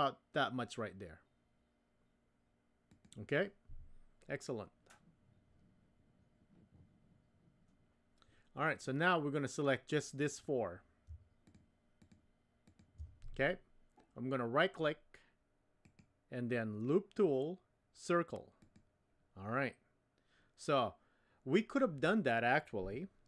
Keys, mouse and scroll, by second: 10.2 click, 12.0 shift+click, 12.6 shift+click, 15.9-18.8 right drag, 18.7 typing.